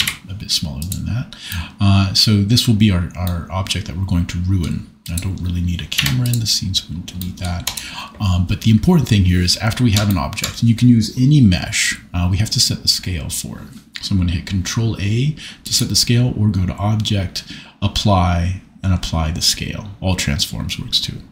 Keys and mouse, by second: 0.0 s, 0.8 click, 5.9 x, 15.7-21.3 drag.